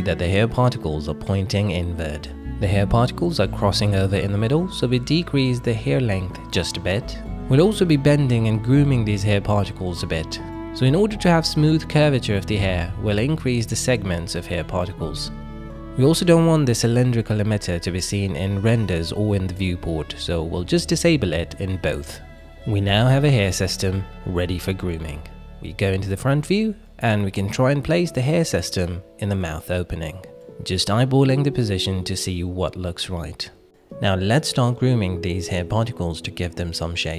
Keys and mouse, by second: 0.9 KP_1, 3.6-8.5 shift+drag, 9.4-9.9 middle drag, 10.2 drag, 10.6-12.0 middle drag, 12.1 click, 13.4-14.8 drag, 16.2-17.5 middle drag, 18.0 click, 18.5 middle click, 19.5 click, 19.9 middle click, 21.3 middle click, 22.2 click, 22.7-23.0 drag, 23.0-24.9 middle drag, 27.0 KP_1, 28.1 shift+middle drag, 28.6 shift+middle click, 29.0 g, 33.3 shift+click, 33.7 middle click, 33.9 Tab, 35.4 middle click, 36.0 middle click, 37.0 alt+z.